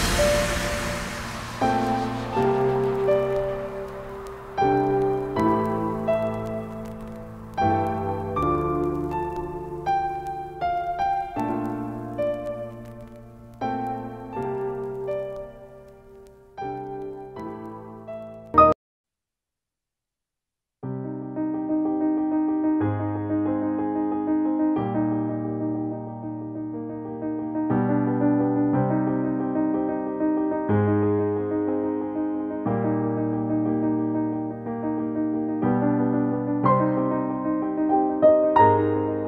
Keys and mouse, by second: 3.4-5.9 drag, 6.9 9, 9.4 click, 10.2-10.6 typing, 12.1-12.9 typing, 13.3-17.3 drag, 19.1 click, 19.2 click, 24.4-29.7 drag, 30.7 click, 31.9 shift+Up, 33.4 shift+Up, 35.4 Down, 36.4 click, 38.9 Up.